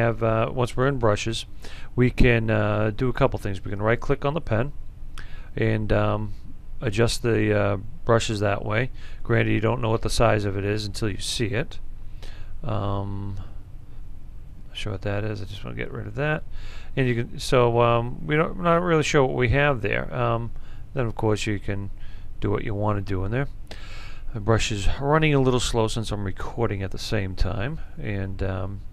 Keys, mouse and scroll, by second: 6.7-22.0 drag.